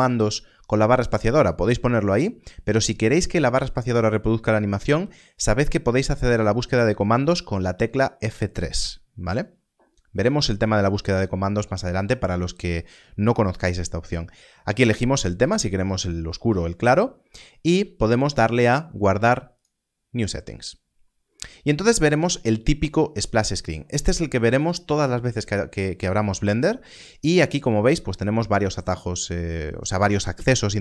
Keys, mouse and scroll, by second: 16.0 click, 19.5 click.